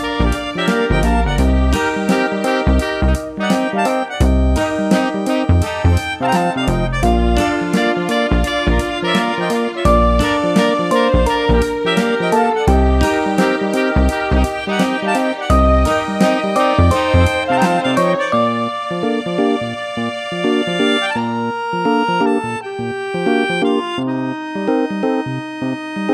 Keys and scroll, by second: 6.4 8, 6.8 Return, 9.5 super+d, 14.2 super+c, 14.5 super+v.